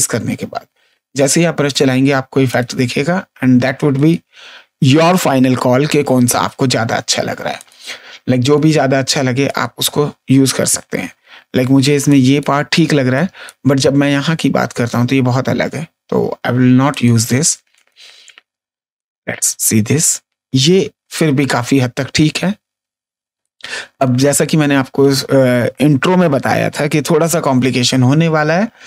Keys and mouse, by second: 1.6 click, 3.9 click, 6.3 ctrl+z, 7.5 click, 11.6 space, 12.0 click, 13.1 click, 15.4 ctrl+z, 16.8 click, 18.9 click, 20.7 ctrl+space, 21.1 click, 23.3 ctrl+space.